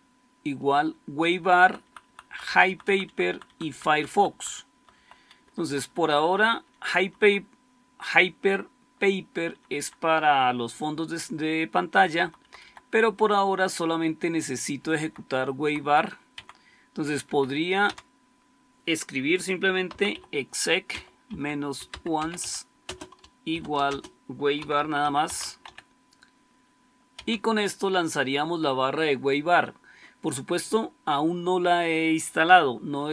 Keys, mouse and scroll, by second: 1.3 Right, 1.5 Right, 1.7 Right, 1.9 Right, 2.1 Right, 2.4 Right, 2.6 Right, 2.7 Right, 2.9 Right, 3.2 Right, 3.3 Right, 3.7 Right, 3.9 Right, 4.2 Right, 4.6 Right, 4.8 Right, 5.3 Left, 5.5 Left, 5.7 Left, 5.9 Left, 6.1 Left, 6.3 Left, 6.5 Left, 6.7 Left, 6.9 Left, 7.1 Left, 9.4 Left, 9.6 Left, 12.1 Left, 12.3 Left, 12.5 Left, 14.7 Left, 14.9 Left, 15.6 Left, 15.8 Left, 16.3 End, 17.2 Up, 17.7 Down, 19.3-27.6 typing.